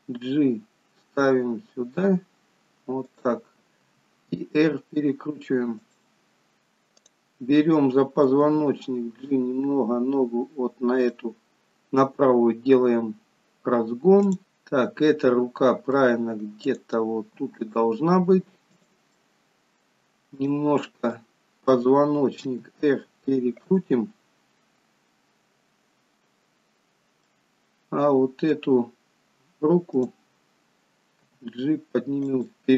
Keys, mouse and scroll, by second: 3.9 r, 7.1 click, 8.7 g, 14.5 middle click, 16.7 click, 17.4 g, 19.2 middle click, 20.8 click, 21.2 middle click, 22.6 r, 27.3 middle click, 30.0 click, 31.3 g.